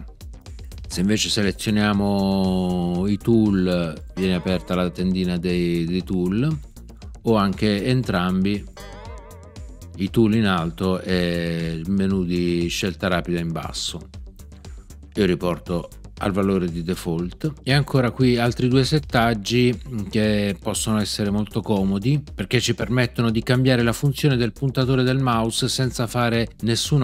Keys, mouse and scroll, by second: 4.1 right click, 8.7 right click.